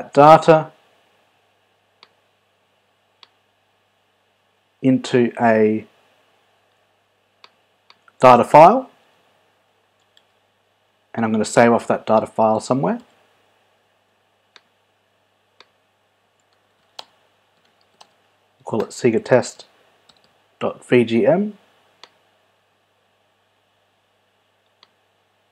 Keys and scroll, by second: 9.6 super+v, 10.4 shift+super+s, 13.3 super+d, 17.2 shift+space, 18.1 space, 18.9 BackSpace.